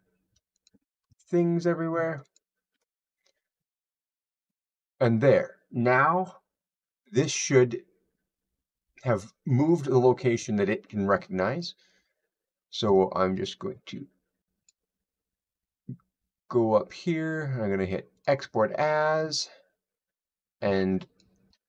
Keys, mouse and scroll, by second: 0.5 click, 2.2 click, 14.5 click, 18.1 click, 21.1 click.